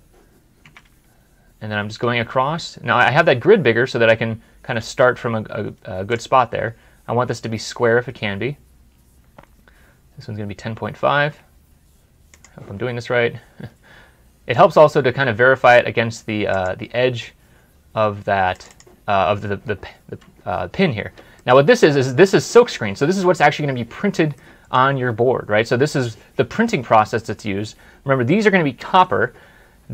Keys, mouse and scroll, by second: 18.5 alt+Tab, 19.0 double click, 21.2 middle click, 24.2 middle click.